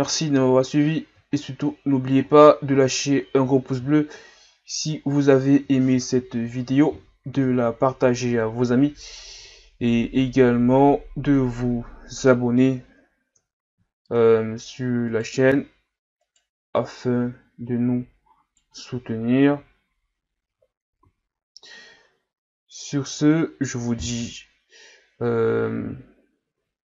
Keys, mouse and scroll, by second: 0.7-2.2 scroll up 11, 2.2-2.7 scroll down 1, 2.7-3.4 scroll up 9, 3.4-4.0 scroll down 1, 4.7-7.7 middle drag, 9.3 KP_3, 11.4 KP_1, 13.4 KP_3, 14.1-15.1 shift+scroll up 8, 15.1 right click, 15.5 Tab, 16.2 right click, 16.8 right click, 19.4 KP_1, 20.5 Tab, 21.0 a, 21.4 scroll down 2, 23.1-23.6 scroll up 3, 24.9 shift+scroll down 1, 25.6-26.2 scroll up 1, 26.4 Tab.